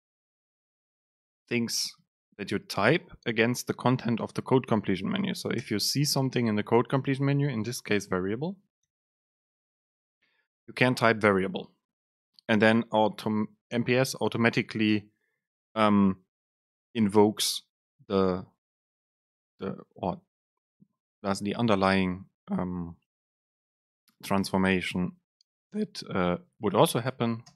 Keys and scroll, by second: 1.9 BackSpace, 5.7 super+space, 26.7 BackSpace.